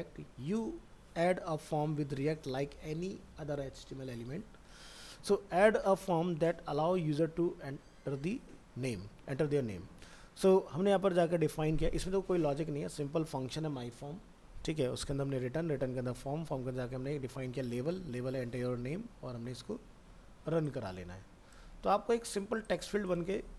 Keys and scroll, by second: 21.8 ctrl+c.